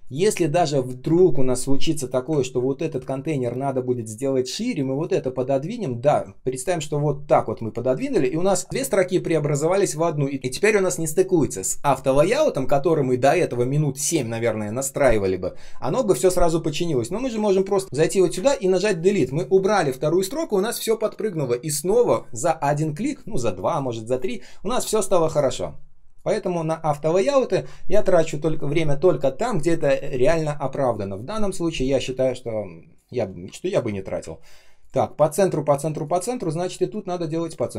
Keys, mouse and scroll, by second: 0.6 ctrl+click, 0.8 ctrl+scroll down 1, 2.3 ctrl+scroll down 1, 17.4 ctrl+click, 17.6 ctrl+click, 17.8 Right, 18.3 Delete, 27.4 ctrl+s, 31.9 space, 32.4 space, 32.5 space, 33.6 ctrl+scroll down 1, 34.2 ctrl+scroll up 1, 35.9 ctrl+click.